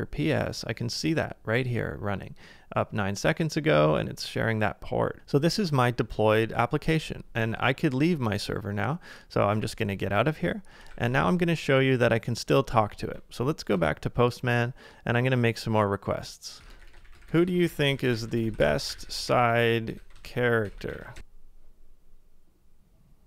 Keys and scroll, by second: 9.5 ctrl+d, 10.9 ctrl+a, 12.0-12.8 typing, 13.0 super+Tab, 16.6-17.8 typing, 20.9-21.7 typing.